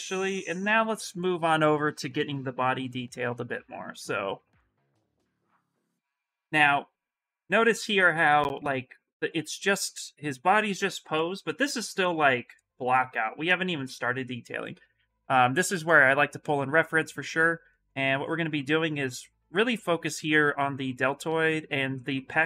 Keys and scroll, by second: 3.3 s, 8.2 s.